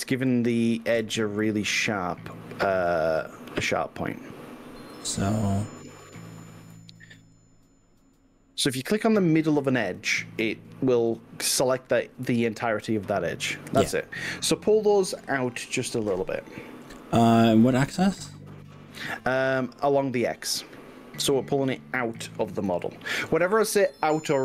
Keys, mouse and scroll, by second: 0.1 click, 0.9 drag, 1.9 super+click, 2.6 middle drag, 2.9 click, 3.4-3.9 scroll up 3, 6.3 alt+click, 8.7 alt+click, 9.9 alt+shift+click, 11.1-16.2 middle drag, 17.2-21.4 middle drag, 22.2 g, 22.7 x.